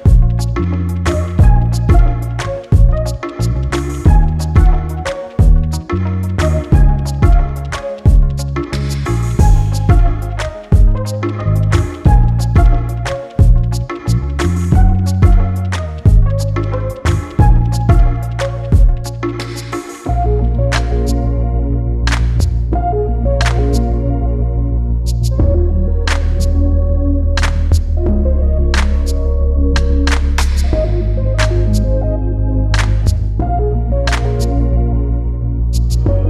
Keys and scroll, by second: 21.7 ctrl+x, 25.5 ctrl+v.